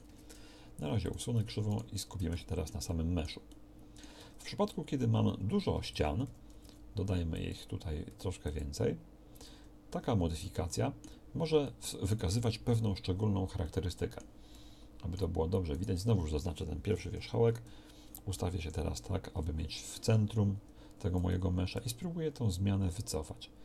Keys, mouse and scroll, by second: 0.1 Tab, 0.9 x, 2.4-3.3 drag, 4.3 Tab, 5.8 a, 6.3 w, 6.7 w, 8.1 w, 9.5 Tab, 10.0 Tab, 15.7-17.0 middle drag, 17.0 KP_1, 18.5 KP_Decimal, 21.7 g.